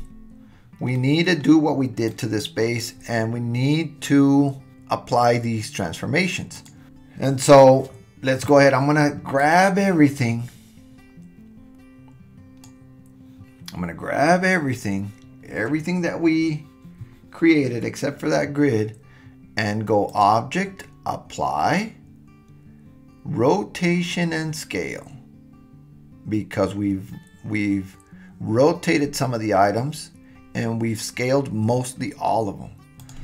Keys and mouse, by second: 0.9 middle click, 2.0 click, 4.7-6.6 drag, 9.4-12.7 drag, 20.1-33.1 drag.